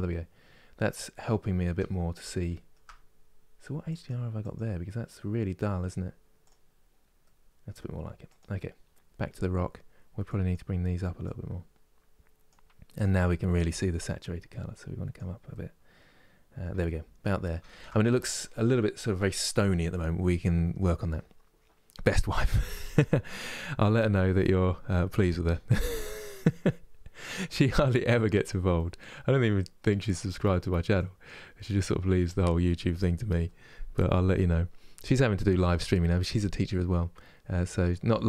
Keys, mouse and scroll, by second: 0.2 scroll down 1, 0.7 middle click, 1.1-1.8 scroll down 2, 2.3-3.7 shift+middle drag, 4.1-6.9 drag, 6.9-8.1 middle drag, 8.1 click, 10.0-13.6 drag, 15.2-16.8 middle drag, 16.8-17.3 scroll down 1, 17.3-29.7 shift+middle drag, 29.7 click, 31.6 click, 38.0-38.2 drag.